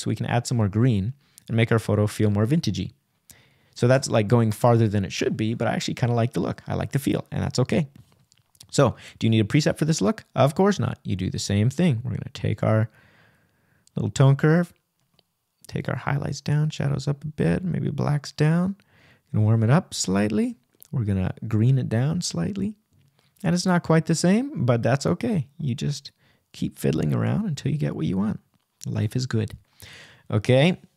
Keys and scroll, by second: 22.1 Right.